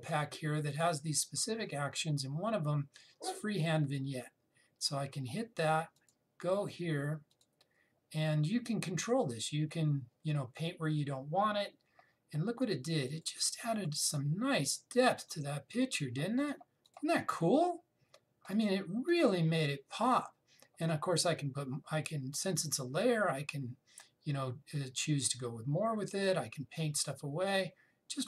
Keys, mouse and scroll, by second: 1.4 click, 4.5 click, 13.7 click.